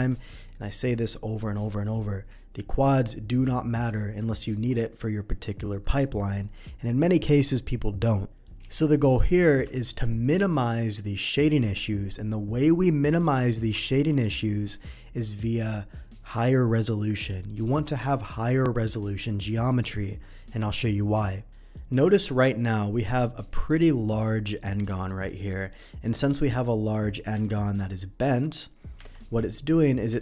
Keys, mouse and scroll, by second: 8.3 middle drag, 8.8 n, 9.2 middle click, 9.7 shift+middle click, 21.5 middle click, 22.2 Tab, 22.4 middle click, 23.7 click, 25.1 middle click, 26.1 middle click, 27.4 Tab, 28.4 middle click.